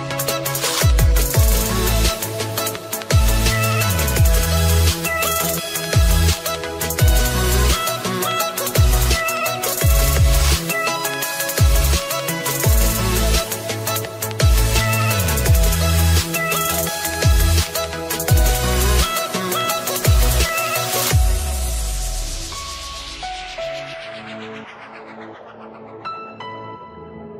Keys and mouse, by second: 0.8 space, 3.0 click, 5.0 click, 7.2 right click, 7.8 click, 9.5 click, 12.8 click, 14.9 click, 16.9 click, 19.6 click, 20.7 click, 21.9 click, 23.2 click, 25.6 space.